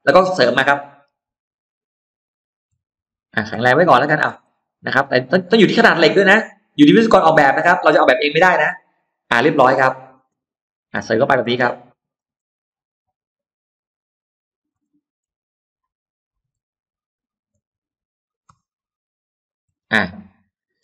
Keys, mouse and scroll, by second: 0.6-1.0 scroll up 1, 1.0 m, 2.3 click, 3.5 shift+middle click, 4.0-4.8 shift+scroll up 4, 4.3 shift+middle click, 5.8 shift+scroll up 2, 6.8 shift+click, 7.2-7.5 scroll down 2, 7.6-8.4 scroll up 2, 7.8 space, 8.7 middle click, 8.8-9.3 scroll up 1, 9.3 scroll down 1, 9.6 click, 10.1 middle click, 11.0-11.7 scroll up 1, 11.4 middle click, 12.2-12.9 scroll up 1, 13.2 click, 13.5-13.8 scroll up 1, 14.2 shift+click, 14.4-15.3 shift+scroll down 5, 14.7 middle click, 15.5 middle click, 15.8 scroll down 2, 16.3 m, 17.0 click, 17.4 ctrl+middle click, 19.2 shift+click, 19.6-20.0 scroll down 2, 19.8 middle click, 20.4-20.8 scroll down 3, 20.7 space.